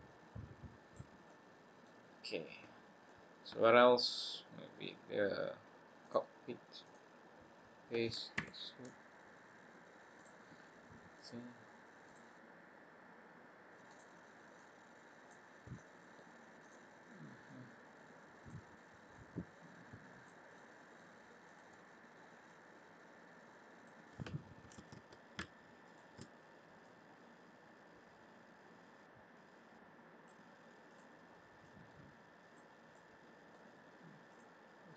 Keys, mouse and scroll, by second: 1.2 middle click, 2.0-2.6 scroll down 2, 2.6-3.0 scroll down 3, 3.0 middle click, 4.8 scroll up 1, 6.0 click, 6.8 click, 8.4 e, 11.1 click, 12.0 click, 13.9 click, 14.5 click, 15.7 middle click, 16.6 click, 17.4 click, 19.6 click, 20.5 middle click, 21.4 click, 22.4 click, 24.7 ctrl+z, 25.8 alt+shift+click, 26.8 click, 30.9 click, 31.6 click, 32.9 middle click, 34.2 click.